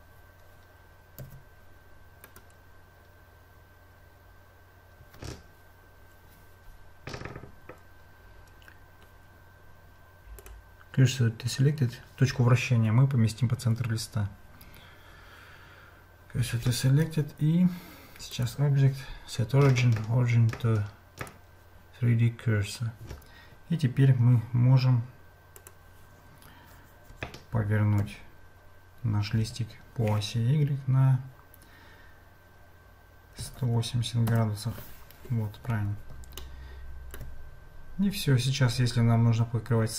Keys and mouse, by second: 1.2 a, 2.4-10.5 right drag, 17.1 Tab, 18.3-21.3 drag, 36.4 shift+middle click.